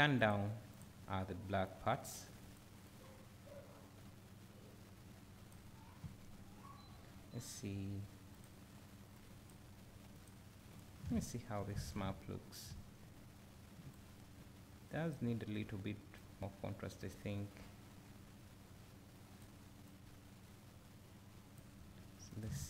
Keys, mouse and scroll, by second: 0.2-2.4 drag, 9.1 click, 10.7 click, 11.2 ctrl+shift+click, 14.0-22.4 drag.